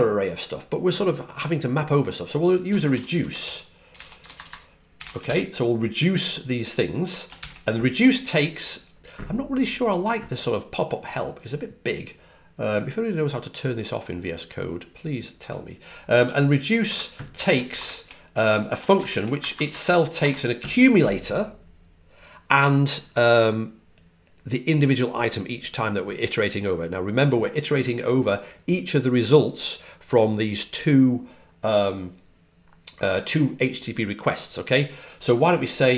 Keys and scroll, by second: 2.6-5.4 typing, 16.4-17.3 typing, 19.2-19.9 typing.